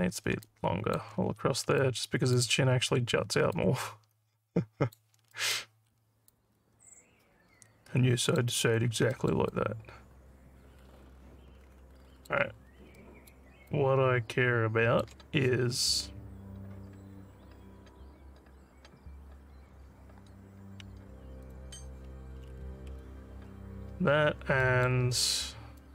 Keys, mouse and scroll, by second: 0.4 alt+click, 1.8 alt+click, 3.6-4.9 alt+drag, 5.4 alt+middle click, 6.3-8.4 alt+drag, 8.7 scroll down 2, 9.2 alt+middle click, 9.5-12.3 alt+drag, 13.0 alt+middle click, 13.7-15.0 alt+drag, 21.5 click, 24.3 alt+middle click, 24.7 alt+middle click, 25.4 alt+scroll up 2, 25.8 alt+middle click.